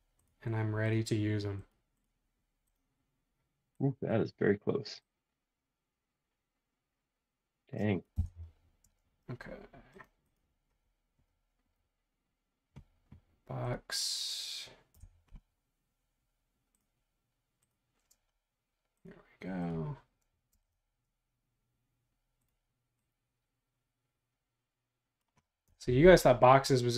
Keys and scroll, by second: 8.2 Return, 8.8 space, 14.9 Return, 20.5 space, 25.8 Return.